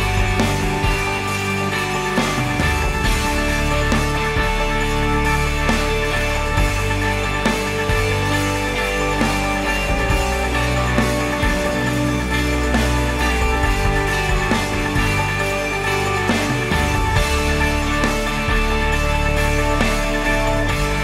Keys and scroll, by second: 2.2 ctrl+s, 18.7 ctrl+s.